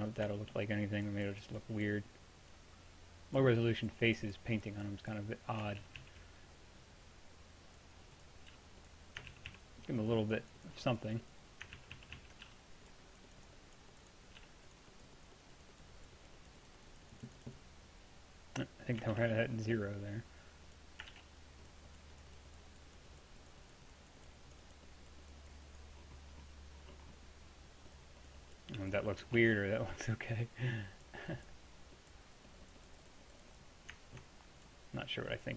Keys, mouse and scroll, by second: 1.0-5.9 drag, 5.9 ctrl+z, 6.1 ctrl+z, 8.6 f, 9.4 ctrl+z, 9.6 ctrl+z, 11.8 ctrl+z, 12.0 ctrl+z, 12.2 ctrl+z, 12.5 f, 14.5 f, 19.2 shift+f, 21.2 shift+f, 28.0 click, 29.4 ctrl+z.